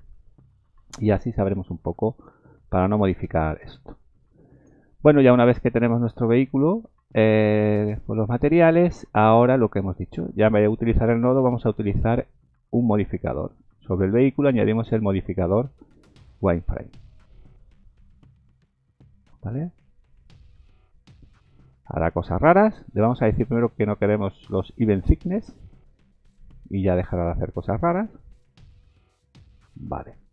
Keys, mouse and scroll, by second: 2.2 click, 4.6 click, 6.4-6.9 scroll down 2, 6.9 scroll up 2, 12.0 click, 14.8 click, 28.9 click.